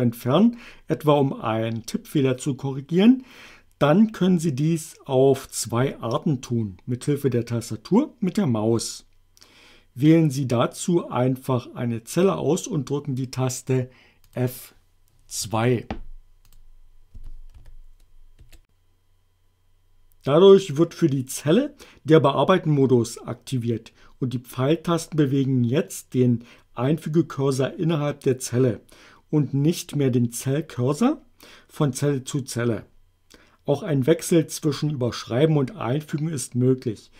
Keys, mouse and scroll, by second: 14.2 click, 15.4 F2, 16.5 click, 17.2 a, 17.6 b, 18.4 Return.